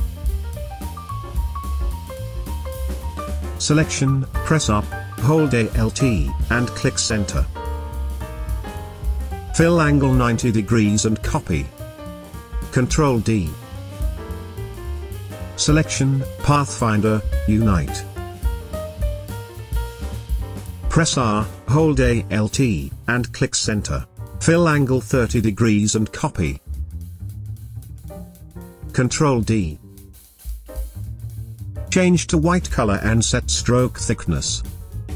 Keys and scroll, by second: 0.7 space, 5.0 r, 9.6-10.4 typing, 12.8 ctrl+d, 13.9 v, 20.6 r, 25.5-26.4 typing, 29.2 ctrl+d, 30.1 v.